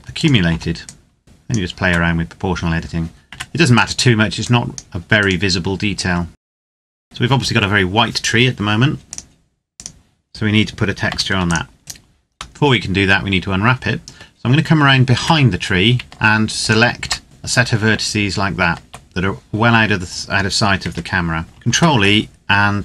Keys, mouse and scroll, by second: 0.8 click, 1.2-1.6 scroll down 2, 1.6 Tab, 3.4 right click, 4.1 click, 4.9 right click, 5.7 click, 6.2 Tab, 6.4 ctrl+s, 6.4 click, 9.0 click, 11.0 ctrl+s, 11.3 click, 11.8 right click, 12.6 middle click, 14.4-14.9 scroll down 1, 14.9 Tab, 16.6 alt+right click, 20.7 Tab, 21.4 ctrl+e.